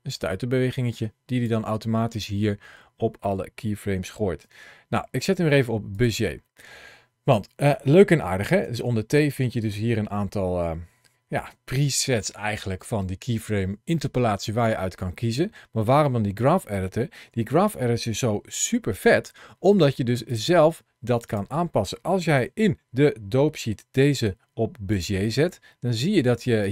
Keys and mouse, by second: 2.0 middle click, 4.2 t, 8.5 t, 20.1 click, 21.1 click, 22.2 t, 26.0 middle click, 26.5 click.